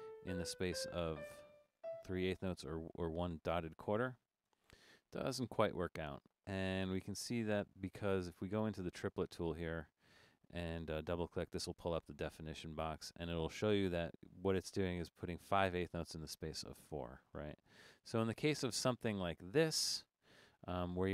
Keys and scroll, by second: 0.1 Up, 0.6 Up, 0.7 4, 1.0 Up, 1.2 4, 1.6 Up, 1.8 4, 4.5 0, 18.3 Escape.